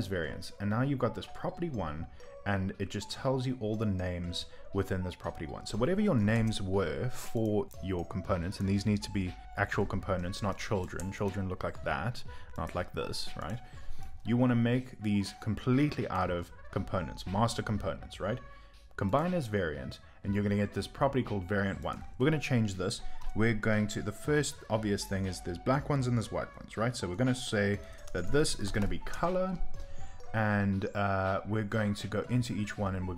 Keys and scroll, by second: 32.0 Return, 32.0 typing.